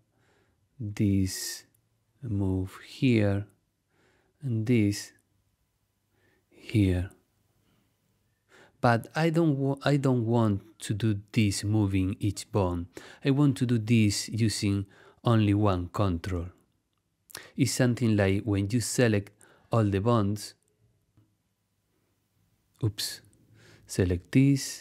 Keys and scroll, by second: 16.8 super+z.